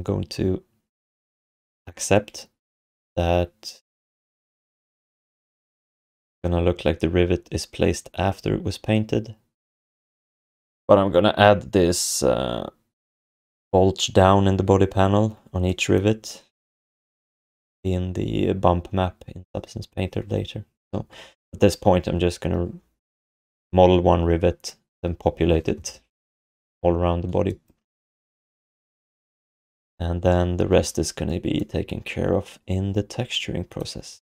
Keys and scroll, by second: 28.6 ctrl+s.